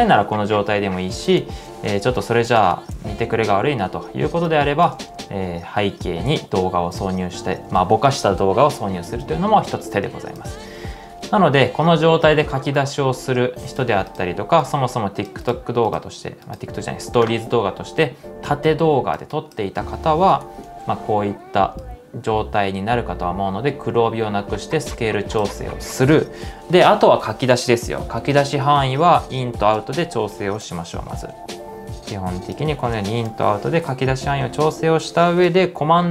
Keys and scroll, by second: 0.1 space, 1.5 shift+z, 1.7 shift+z, 2.8 shift+z, 5.0 space, 7.6 space, 20.1-21.0 typing, 30.1-31.2 typing, 32.6-33.8 typing.